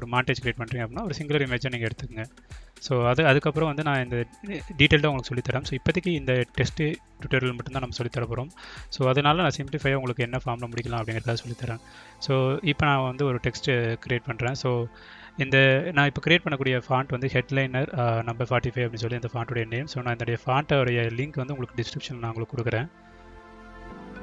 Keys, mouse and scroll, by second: 0.1 click, 0.2 click, 0.3 click, 0.4 click, 0.6 click, 1.3 alt+click, 1.6 click, 1.8 click, 1.9 click, 2.8 ctrl+z, 5.5 click, 6.6 click, 8.7 shift+s, 9.2 shift+e, 9.8 shift+a, 10.1 shift+s, 12.3 shift+space, 13.4 shift+3, 14.1 ctrl+a, 15.9 click, 17.4-19.5 drag, 20.3 click, 21.3 click, 22.1-23.5 drag.